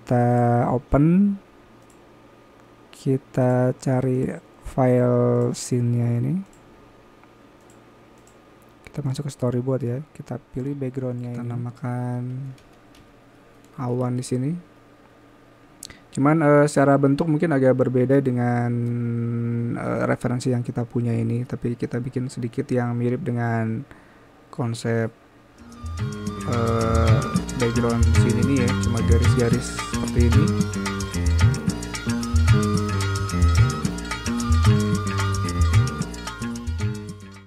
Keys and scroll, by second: 13.7-15.1 typing.